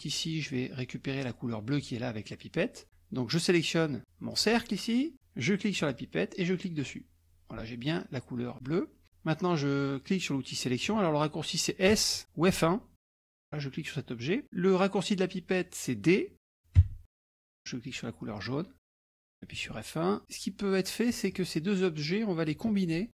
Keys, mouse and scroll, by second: 4.3 click, 5.8 click, 6.8 click, 12.0 s, 12.6 F1, 13.2 click, 16.9 d, 17.9 click, 19.7 F1, 21.3 shift+click.